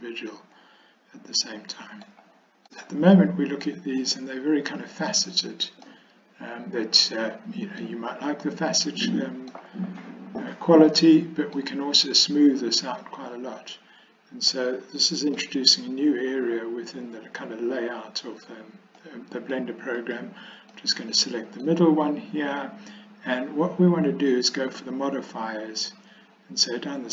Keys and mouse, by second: 3.7-4.1 middle drag, 6.0-7.9 middle drag, 8.5-9.6 middle drag, 11.1 middle click, 14.6 middle click, 19.1 middle click, 20.0 click, 20.8-21.7 middle drag.